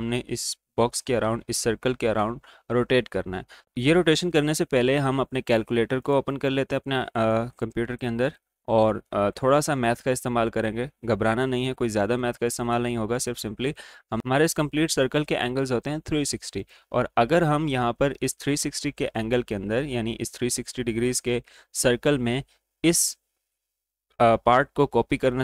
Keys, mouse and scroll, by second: 3.6 click, 5.9-10.1 drag, 13.3 click, 16.5 click.